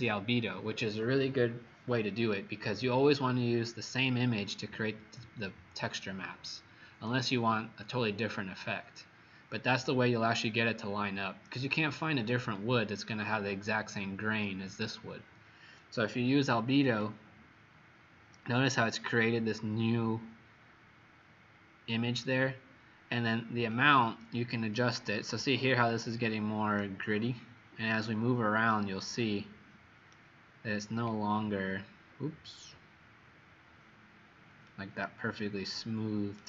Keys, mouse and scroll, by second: 26.7 right click, 30.8-31.2 scroll up 5, 32.0-33.2 scroll down 2, 33.3 scroll down 1, 34.6 right click.